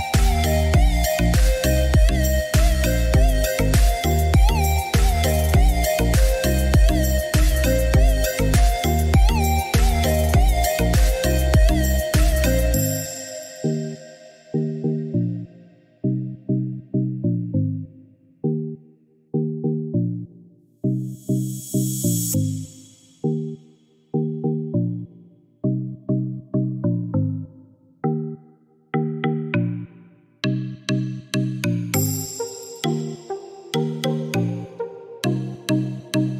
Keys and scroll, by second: 7.6 3, 8.2 9, 10.6 7, 11.2 5, 11.3 Return, 18.6 7, 19.0 Return, 30.4 4, 31.7 1, 32.0 Return, 33.3 Escape.